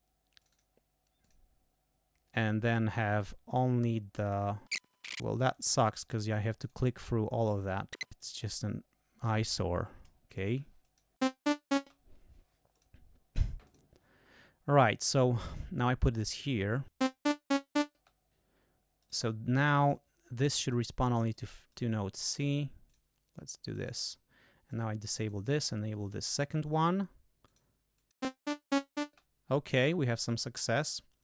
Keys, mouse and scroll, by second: 0.4 click, 1.2 click, 4.1 scroll down 2, 4.7 scroll up 2, 4.9 scroll down 2, 5.1 click, 5.3 click, 5.5 click, 5.9 click, 6.2 click, 6.6 click, 7.0 click, 7.4 click, 8.0 click, 8.1 click, 8.2 click, 10.3 click, 10.8 click, 11.2 space, 11.8 space, 12.7 click, 13.6 click, 15.0 click, 17.0 click, 17.0 space, 17.9 space, 19.0 right click, 19.8 click, 20.6 click, 21.3 right click, 21.7 right click, 22.9 click, 23.6 click, 24.7 click, 25.6 click, 27.4 click, 27.9 click, 28.2 space, 29.0 space, 30.2 click, 31.0 right click.